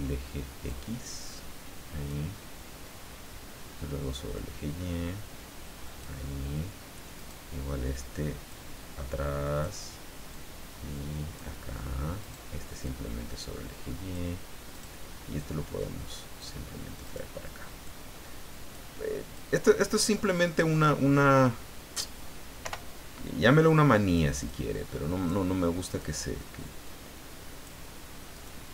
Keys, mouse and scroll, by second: 0.6-2.3 drag, 4.3-6.2 drag, 7.1 right click, 8.5-9.8 drag, 10.3-11.5 drag, 12.2 right click, 12.8-14.3 drag, 14.7 right click, 15.3-16.6 drag, 17.0 right click, 17.8 click, 19.3 click, 20.4 right click, 22.6 o, 23.6 click, 24.4 click, 25.8 right click, 26.8 click, 28.3 right click.